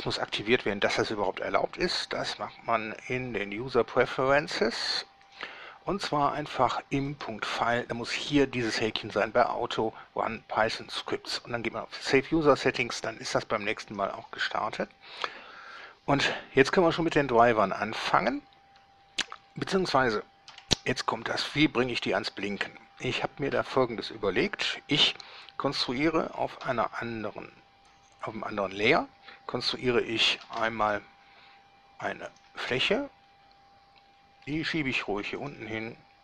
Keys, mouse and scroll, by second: 2.4 click, 5.5 click, 7.3 click, 14.0 click, 17.6 right click, 19.6 scroll down 2, 19.7 scroll up 2, 20.7 7, 26.8 2, 30.6 shift+a, 32.5 click, 34.7 g, 35.6 click.